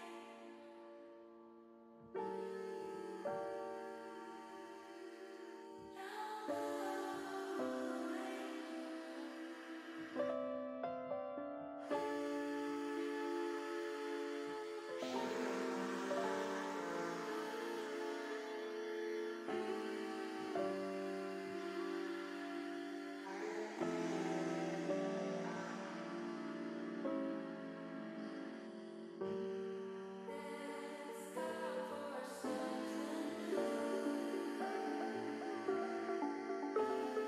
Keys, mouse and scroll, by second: 3.2 ctrl+z, 3.6 ctrl+z, 4.5 click, 5.8 alt+shift+click, 7.6 m, 9.4 u, 10.9 click, 11.9 middle click, 13.8 middle click, 15.1 shift+middle click, 16.3 shift+middle click, 16.8 middle click, 18.8 a, 19.6 click, 20.4 middle click, 21.9 alt+shift+click, 22.8-23.8 middle drag, 23.9 middle click, 26.2 u, 27.5 click, 28.7 click, 29.1-30.3 middle drag, 31.0 shift+middle click, 32.1 shift+middle click, 32.8 middle click, 34.2 shift+middle click, 35.3-37.2 middle drag.